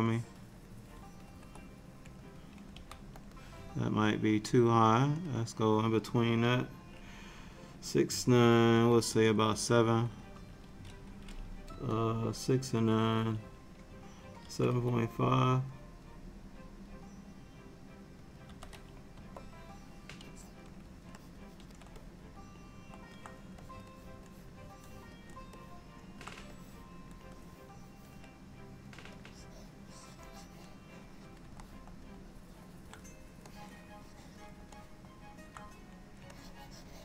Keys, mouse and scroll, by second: 0.2 click, 1.4 ctrl+z, 2.8 f, 4.6 click, 20.3 click, 21.3 click, 21.6 click, 22.1 middle click, 23.7 click, 24.0 click, 24.4 click, 24.8 click, 25.7 middle click, 26.6 click, 27.4 click, 27.9 click, 29.4 click, 31.7 middle click, 33.6 click, 34.8 middle click, 36.4 ctrl+click, 36.5 ctrl+click, 36.8 ctrl+click.